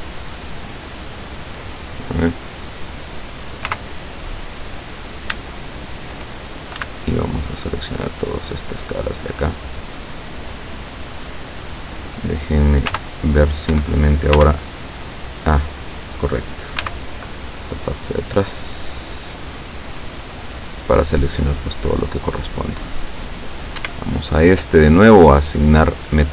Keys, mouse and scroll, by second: 3.7 z, 6.8 c, 7.2-10.6 drag, 12.9 z, 13.8 Escape, 14.4 z, 14.9-15.9 middle drag, 16.9 c, 17.7-23.1 drag, 23.9 Escape, 25.8 click.